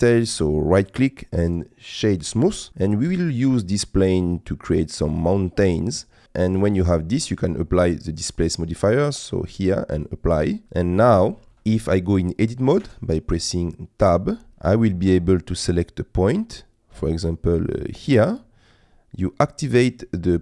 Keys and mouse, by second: 0.9-2.2 right drag, 2.2 click, 2.8 middle click, 4.7-5.9 middle drag, 6.5 middle click, 8.3-10.1 drag, 11.4 middle click, 13.3 Tab, 14.5 shift+middle click, 17.0 click.